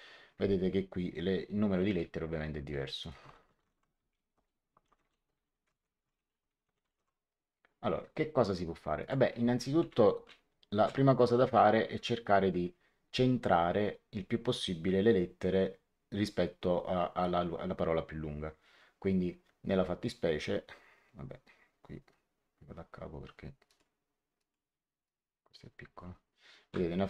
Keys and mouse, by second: 2.6 click, 3.1-6.8 typing, 4.3 Return, 8.9 click, 9.7 Home, 10.1 space, 11.8 BackSpace, 19.6 space, 23.6 click.